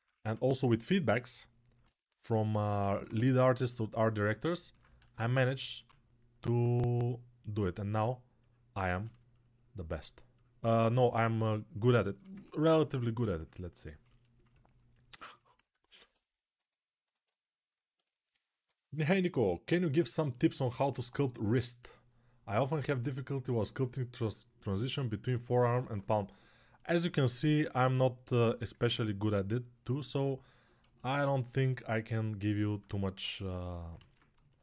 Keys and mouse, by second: 0.1 1, 0.9-1.6 [, 2.6 alt+1, 5.8 alt+q, 5.9 1, 16.3-33.9 alt+shift+right drag, 33.8 ctrl+z.